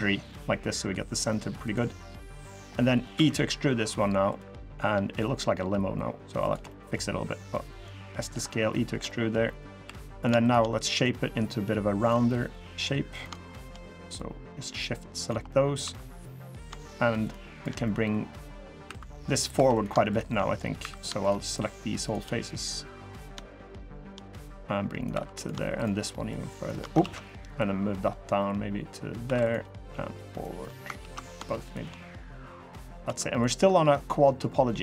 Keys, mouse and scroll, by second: 1.9 middle click, 2.6 middle click, 2.9 e, 4.9 s, 6.4 middle click, 7.3 click, 8.2 middle click, 8.8 middle click, 9.2 middle click, 9.6 3, 9.9 click, 10.2 shift+click, 10.8 click, 12.0 middle click, 12.9 click, 13.3 shift+click, 13.9 click, 15.2 middle click, 15.6 2, 15.8 click, 16.3 click, 16.6 shift+click, 17.0 shift+click, 17.3 shift+click, 17.6 middle click, 18.3 middle click, 18.6 2, 19.3 2, 19.5 click, 19.8 shift+click, 20.5 3, 20.7 click, 21.0 shift+click, 21.2 shift+click, 21.8 shift+click, 22.2 click, 23.4 shift+click, 23.6 shift+click, 24.2 click, 24.9 2, 25.1 click, 25.5 shift+click, 26.0 shift+click, 26.8 ctrl+z, 27.3 click, 29.0 2, 29.2 click, 29.6 click, 30.7 ctrl+z, 31.0 click, 31.4 shift+click, 31.9 click, 32.8 2, 33.1 click, 33.7 middle click, 34.4 middle click.